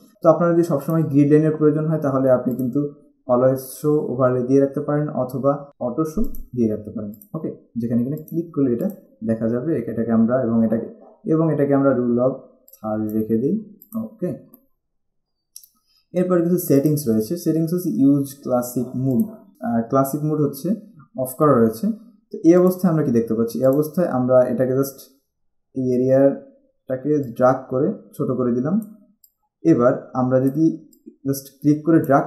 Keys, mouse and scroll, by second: 0.1 click, 2.8 click, 6.5 click, 12.9 click, 17.0 click, 22.8 click, 27.4 click.